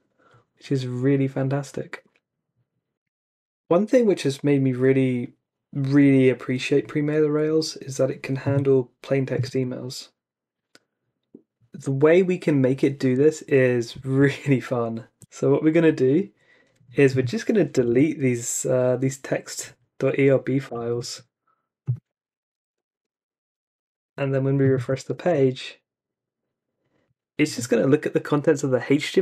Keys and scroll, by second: 14.2 super+Tab, 17.5-18.4 typing, 20.7 y, 22.2-23.4 typing, 25.2 super+r.